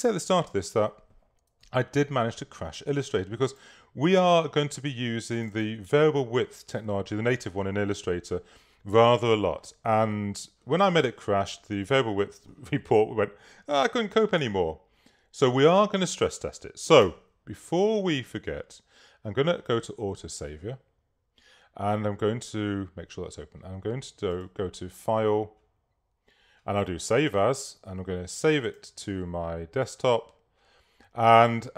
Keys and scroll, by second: 3.1 super+v, 16.1 space.